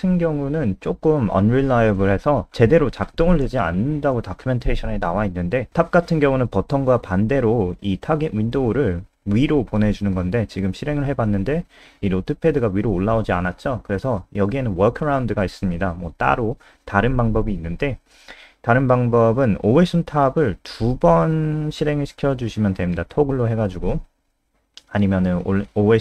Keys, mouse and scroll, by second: 0.4 ctrl+c, 1.4 click, 3.3 click, 5.8-6.9 typing, 8.8 click, 9.5 F5, 13.2 click, 16.0 F5, 20.6 shift+click, 21.0 ctrl+c, 21.0 ctrl+click, 21.4 Return, 21.6 ctrl+v, 22.5 click.